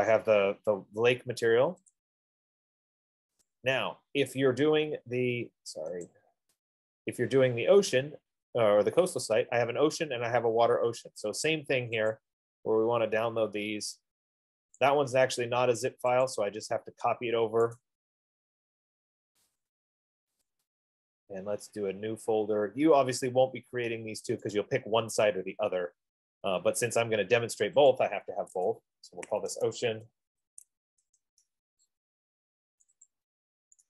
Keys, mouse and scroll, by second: 2.2 click, 3.9 click, 6.7 click, 11.4 click, 12.6-14.1 drag, 15.1 click, 16.8 click, 18.3 right click, 19.9 click, 21.1 click, 25.0 right click, 28.3 click, 29.8-31.1 typing, 31.3 Return, 33.0 typing, 33.2 click, 33.6 click.